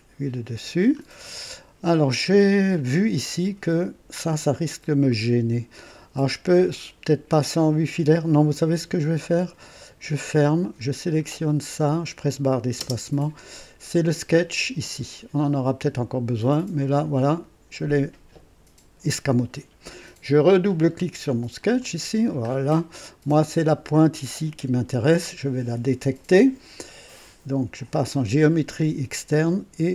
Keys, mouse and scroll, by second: 0.6-0.9 scroll down 2, 1.2-2.0 right drag, 4.5-4.8 scroll up 2, 5.1-5.9 right drag, 9.3 click, 11.6 click, 12.8 space, 13.9 scroll down 2, 21.6 click, 22.4 scroll up 2, 22.9-23.5 right drag, 28.0 click.